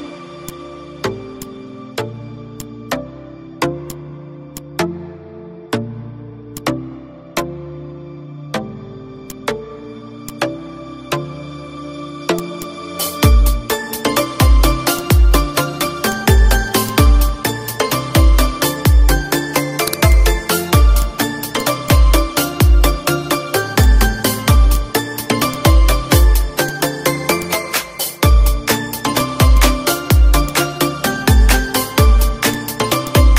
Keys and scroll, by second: 3.4 d, 5.0 ctrl+d, 5.6 Down, 7.9 ctrl+d, 8.3 Down, 13.6 ctrl+shift+=, 14.7 F4, 17.9 z, 18.6 F2, 19.6 ctrl+shift+c, 22.2 Up, 28.0 ctrl+shift+=, 29.8 -, 32.9 z.